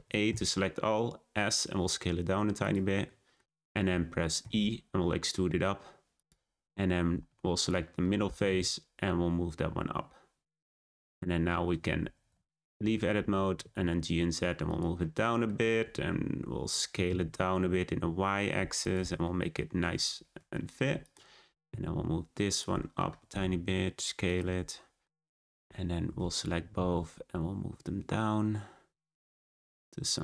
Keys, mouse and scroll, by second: 0.2 s, 3.0-4.4 middle drag, 4.4 e, 7.2 3, 7.5 click, 8.4 g, 10.9-12.0 middle drag, 12.0 Tab, 13.5 g, 15.0-15.5 middle drag, 15.5 Tab, 15.8 a, 16.9 s, 19.2 middle click, 19.9 Tab, 21.0 click, 21.6 g, 22.8 middle click, 23.0 Tab, 23.2 a, 23.4 s, 24.4 Tab, 24.8 scroll down 2, 25.0-26.3 middle drag, 26.3 shift+click, 26.7 g.